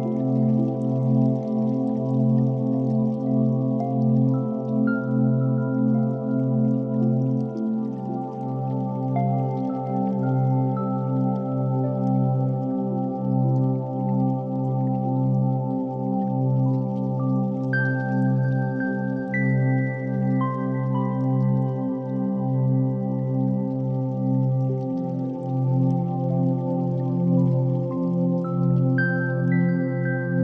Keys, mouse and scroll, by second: 0.2 Tab, 0.4 1, 0.8 alt+z, 1.4 e, 2.5 s, 6.1 middle click, 6.8 Tab, 7.2 alt+z, 7.6 shift+click, 9.0-12.1 drag, 12.3 click, 12.6 ctrl+a, 14.1 shift+click, 15.3-16.1 scroll down 2, 16.1-17.3 drag, 17.3-18.4 scroll down 3, 18.4-20.7 drag, 20.7 right click, 21.8 click, 22.4-22.8 scroll down 1, 22.8-24.2 middle drag, 24.2 KP_1, 24.3 x, 25.4 shift+a, 27.8 r.